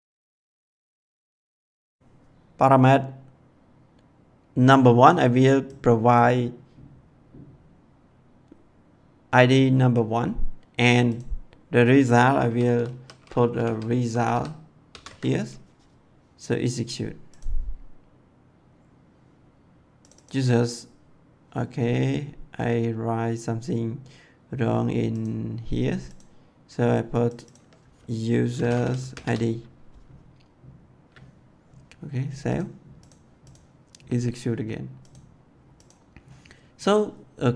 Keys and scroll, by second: 0.5 ', 1.1 Left, 12.7-14.9 typing, 28.4-29.1 typing.